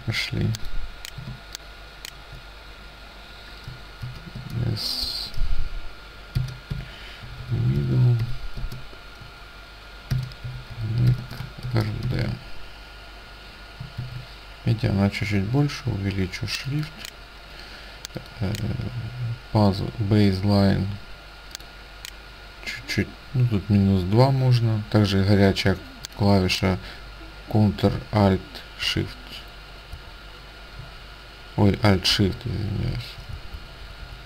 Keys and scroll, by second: 1.4 ctrl+space, 4.1 shift+s, 4.4 space, 6.3-12.1 typing, 14.1 ctrl+a, 28.9 ctrl+alt+Up, 30.0 ctrl+alt+Down, 32.2 alt+shift+Down, 33.4 alt+shift+Down, 33.7 alt+shift+Down, 33.9 alt+shift+Up, 33.9 alt+shift+Down, 34.1 alt+shift+Up, 34.1 alt+shift+Down.